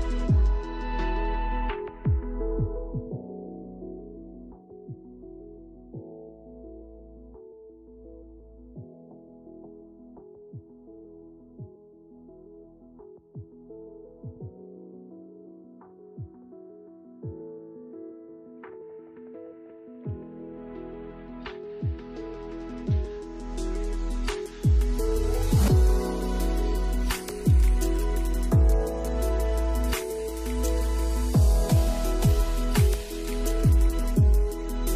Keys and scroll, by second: 7.4 space, 15.1 space.